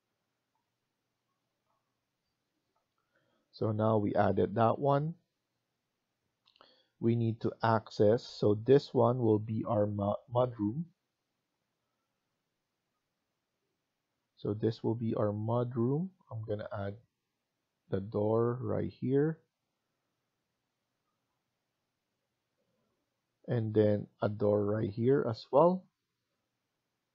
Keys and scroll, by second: 10.3 Escape, 11.6 Escape.